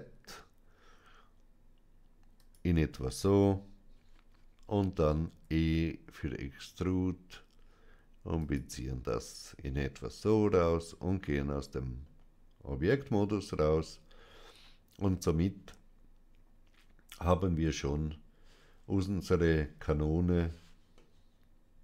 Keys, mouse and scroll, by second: 2.3-3.9 drag, 5.1 e, 8.3 click, 10.1 Tab, 11.2 Tab, 11.2 middle click, 14.3 scroll down 1, 20.9-21.8 middle drag.